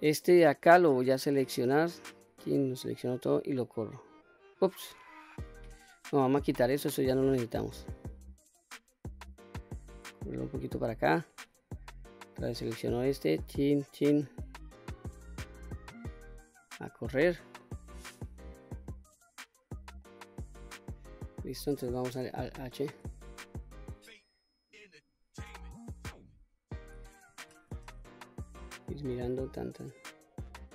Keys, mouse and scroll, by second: 1.9 alt+click, 3.4 click, 5.2 ctrl+z, 6.6 click, 7.9-11.0 drag, 11.8 click, 13.2 alt+click, 14.7-16.4 drag, 17.4 middle click, 18.6-19.1 scroll up 3, 19.1 middle click, 20.1 middle click, 20.9-21.9 scroll down 1, 22.2 alt+h, 23.6-24.5 scroll down 3, 24.5-25.0 scroll up 3, 27.2 ctrl+z, 28.5-30.7 drag.